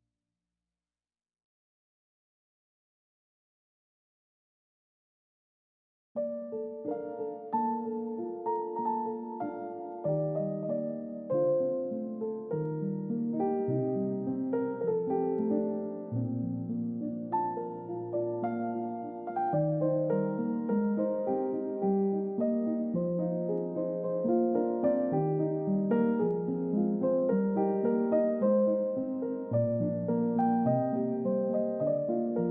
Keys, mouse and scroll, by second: 2.4-3.5 scroll up 1, 4.9 space, 6.0 scroll up 1, 6.3 scroll down 1, 9.4 scroll up 1, 11.1 space, 12.1 i, 13.4 typing, 15.3 scroll down 1, 15.5 middle click, 16.6-17.5 scroll down 1, 17.5 middle click, 17.8 scroll down 1, 18.3 double click, 18.6-20.5 scroll up 1, 20.5 scroll down 1, 23.8-24.9 scroll up 1, 29.7-31.5 scroll down 1, 31.7 middle click.